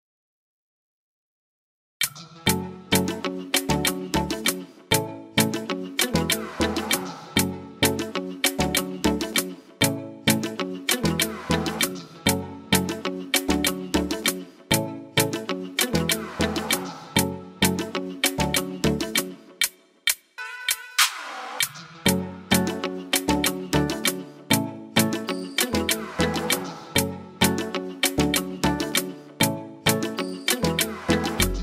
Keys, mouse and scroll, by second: 0.1 shift+click, 0.7 click, 1.6 g, 2.7 shift+middle click, 3.2-3.6 scroll up 1, 3.7 middle click, 4.7 ctrl+s, 13.3 shift+middle click, 14.1 middle click, 15.2 middle click, 15.7-16.1 scroll down 4, 15.9 middle click, 16.3 shift+middle click, 16.4 shift+middle click, 16.7 middle click, 17.0 shift+middle click, 19.6-19.9 scroll down 4, 19.7 middle click, 20.0 shift+middle click, 21.2 click, 22.8 click, 28.4 n, 29.3 click, 30.1 click.